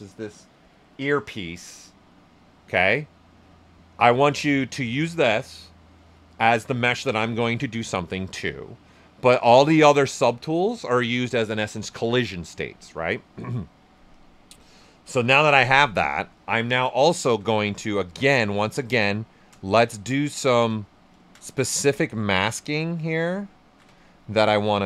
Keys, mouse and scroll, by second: 14.1 click, 15.5 space, 17.1 shift+f, 18.2 ctrl+shift+click, 19.0 shift+right click, 19.7 ctrl+shift+click, 20.7 shift+right click, 21.8-23.2 ctrl+right drag, 23.2 ctrl+shift+click, 24.7 ctrl+right click.